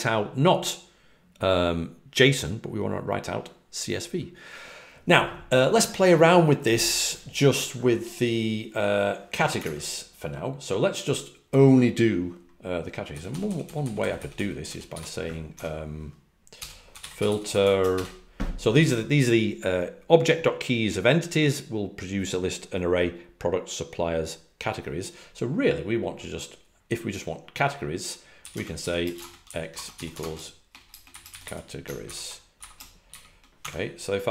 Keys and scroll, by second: 9.5 super+Tab, 13.3-18.0 typing, 30.0 typing.